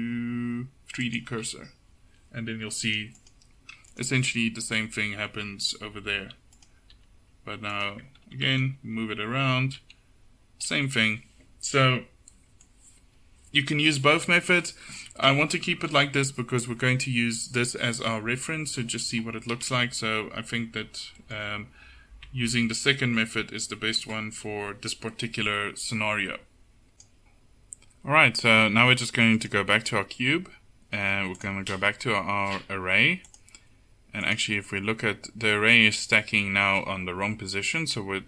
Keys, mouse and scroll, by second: 2.9 click, 4.0-6.0 right drag, 4.3 h, 6.0 alt+h, 7.0 g, 8.0 Tab, 8.3 a, 8.5 a, 9.9 g, 14.2 KP_7, 22.3 Tab, 29.4-34.8 right drag, 34.8-36.8 middle drag.